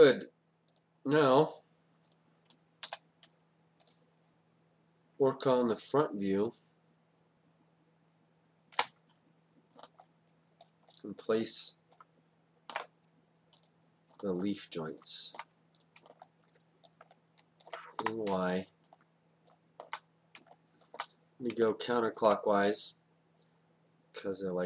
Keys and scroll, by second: 2.9 d, 5.4 space, 18.1 y.